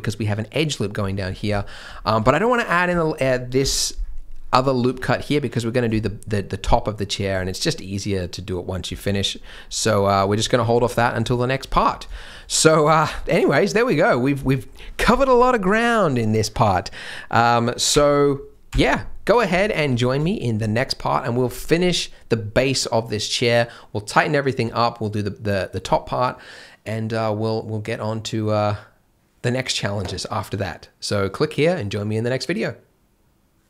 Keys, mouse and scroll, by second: 0.0 Tab, 0.0-0.3 scroll up 1, 1.0 scroll down 1, 1.5 shift+middle click, 2.0 scroll up 1, 2.1 Tab, 2.5 middle click, 2.9 shift+m, 4.8 Tab, 6.1 shift+m, 9.1 scroll down 1, 9.3 scroll up 1, 9.8 middle click, 10.3 Tab, 10.5 scroll down 1, 10.8 middle click, 11.3 shift+middle click, 11.8 scroll down 1, 12.1 shift+middle click, 12.4 middle click, 12.7 scroll up 1, 12.8 Tab, 13.1 shift+middle click, 13.4 scroll up 1, 13.5 middle click, 14.4 shift+middle click, 19.7 shift+m, 20.0 scroll up 1, 20.1-20.6 shift+scroll.